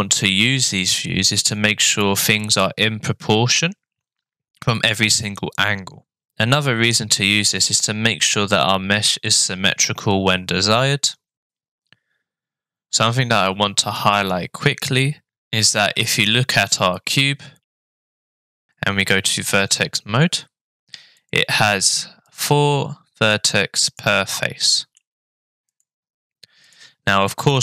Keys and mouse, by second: 15.8-17.7 middle drag, 19.0 click, 21.2 click, 22.3 click, 23.9 click, 24.3 middle click, 25.7 click, 26.7-27.6 drag.